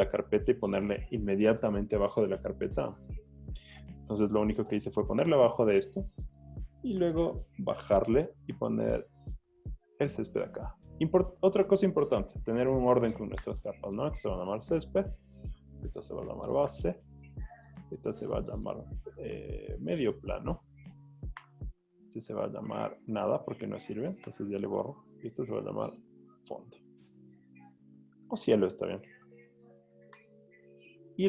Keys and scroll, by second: 3.7 super+z, 11.9-13.0 typing, 15.6 n, 15.9 BackSpace, 16.1 BackSpace, 19.5-20.8 typing, 24.3 BackSpace, 26.4-27.9 typing.